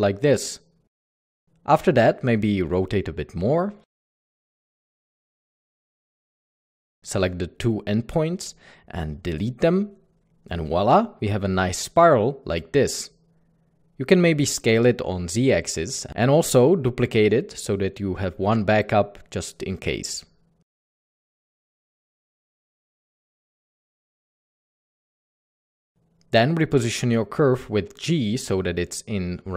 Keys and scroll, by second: 3.2 typing, 8.9 typing, 10.2 Tab, 10.2-11.5 typing, 15.1 typing, 16.7 typing, 18.2 typing, 21.2 typing, 24.3 Tab, 24.8-26.2 typing, 28.2 Escape.